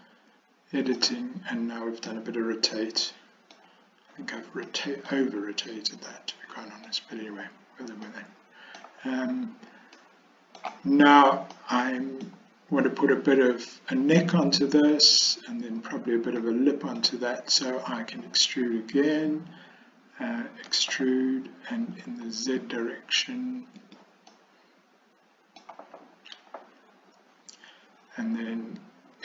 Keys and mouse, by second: 0.0-1.0 middle drag, 2.1-3.6 middle drag, 4.8 middle click, 5.8-6.9 middle drag, 8.1 middle click, 10.0 middle click, 11.6 middle click, 16.5 middle click, 20.8 e, 24.4-25.7 middle drag.